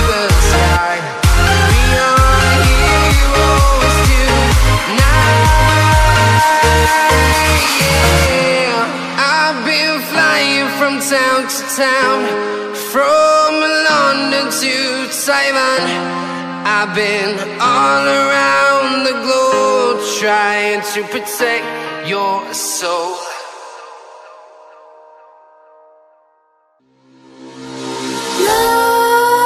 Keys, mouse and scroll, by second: 1.0 0, 4.2 scroll up 1, 4.7 click, 5.3 Delete, 6.0 click, 6.3 Delete, 8.8 click, 9.2-10.1 scroll down 1, 10.1 click, 11.5-12.1 scroll down 1, 12.1 click, 13.4-14.0 scroll down 1, 14.0 click, 18.2 e, 19.5 click, 20.6-21.3 scroll up 1, 21.3 click, 22.2-23.7 typing, 23.2 Down, 24.5 Down, 24.9 Up, 25.3 Return, 26.8 click, 28.8 right click.